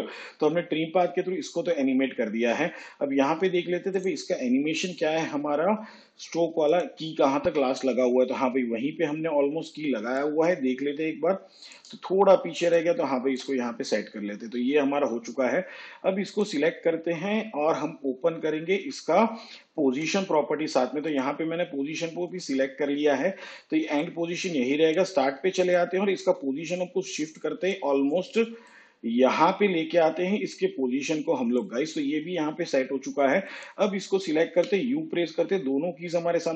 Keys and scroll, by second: 7.4 u, 19.8 p, 34.4 u.